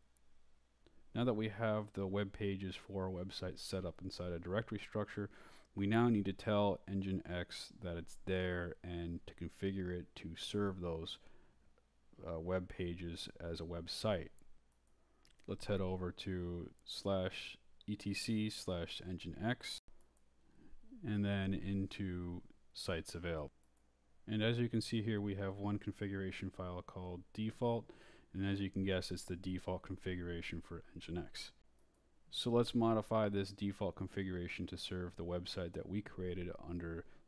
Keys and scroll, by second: 3.1-4.6 typing, 13.2 Return, 13.8-16.6 typing, 16.9 Tab, 17.9-20.6 typing, 18.0 Tab, 19.1 Tab, 19.7 Return, 22.4-24.9 typing, 24.1 Tab, 25.4 Tab, 25.9 Return, 26.0-30.4 typing, 30.7 Return, 32.1 Down, 33.2 Down, 35.0 Up, 35.5 Right.